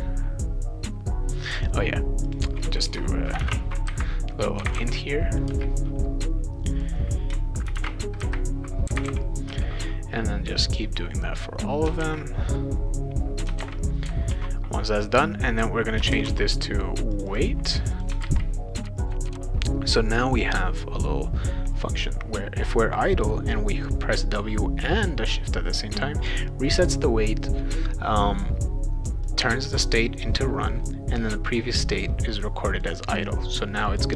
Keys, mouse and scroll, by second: 2.2 click, 3.0-5.3 typing, 6.7 click, 7.4-9.6 typing, 10.7-11.8 drag, 12.0 ctrl+v, 12.5 click, 13.6 ctrl+v, 14.3 ctrl+s, 15.6 click, 15.9-16.9 typing, 17.1 click, 17.3 click, 17.8 click, 17.9 click, 18.2 ctrl+c, 19.0 click, 19.1 ctrl+v, 19.2 click, 29.3-30.7 drag, 31.3-32.8 drag, 33.8 click.